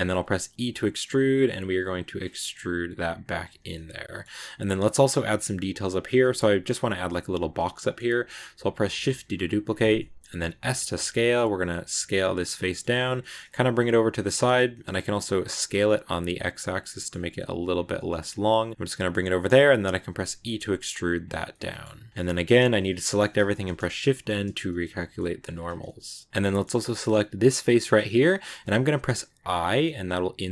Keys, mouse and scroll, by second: 0.3 e, 3.4 Tab, 3.5 scroll down 1, 3.6 middle click, 4.1 Tab, 4.3-5.6 middle drag, 5.6-6.0 scroll up 1, 6.0-10.3 shift+middle drag, 10.3 s, 12.3-13.3 middle drag, 13.3 g, 14.2 middle click, 14.6 s, 16.8 middle click, 17.0 g, 17.8 middle click, 18.1 g, 18.7-20.1 middle drag, 20.1 e, 21.3 scroll down 1, 21.3 middle click, 22.1 a, 22.7 shift+middle click, 23.2 shift+n, 23.6-24.5 scroll up 1, 24.5 right click, 24.7 scroll up 1, 24.8 middle click, 25.3 g, 26.3 shift+middle click, 27.2 right click, 27.5 shift+middle click, 27.7 scroll up 2, 27.9-29.3 middle drag, 29.3 i.